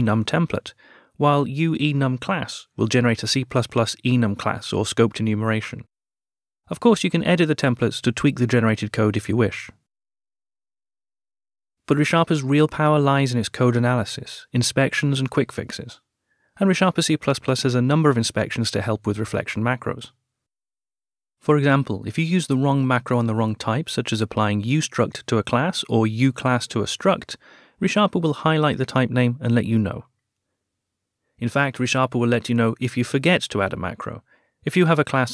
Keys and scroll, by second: 0.5 Return, 3.7 Return, 7.3 Tab, 8.0 Return, 8.5 Return.